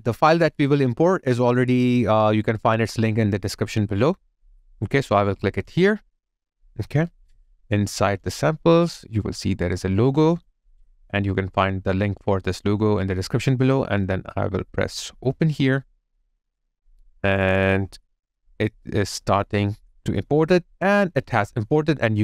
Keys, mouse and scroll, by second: 8.4 double click.